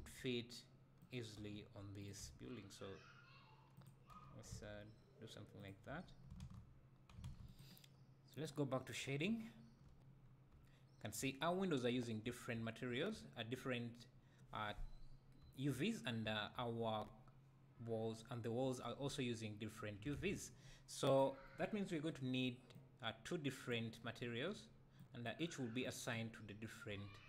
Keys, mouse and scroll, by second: 0.0 s, 1.6 g, 2.2 s, 4.1 click, 4.3 g, 5.8 click, 5.9 Tab, 7.6 click, 9.2 `, 10.2 scroll up 1, 10.5 `, 21.0 click, 22.7-25.0 drag, 25.8 click, 26.4 `.